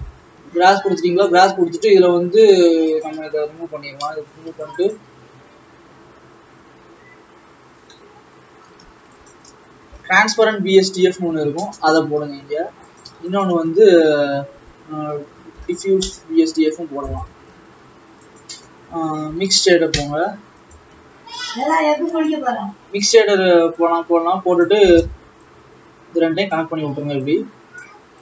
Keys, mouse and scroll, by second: 0.6-1.2 scroll up 1, 3.2 click, 4.2 Delete, 22.6-23.9 drag, 26.4 click.